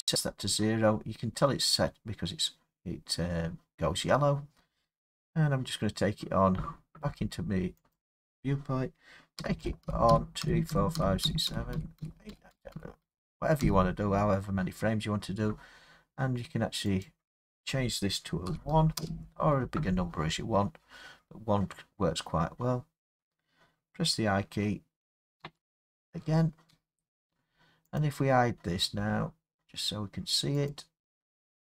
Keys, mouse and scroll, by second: 8.0 click, 9.4 Right, 9.6 Right, 9.8 Right, 10.1 Right, 10.4 Right, 10.7 Right, 11.0 Right, 11.2 Right, 11.5 Right, 11.7 Right, 12.0 Right, 12.3 Right, 12.5 Right, 12.7 Right, 13.0 Right, 13.6 Right, 17.0 click, 18.5 typing, 19.0 Return, 25.4 i, 28.0 click, 30.7 click.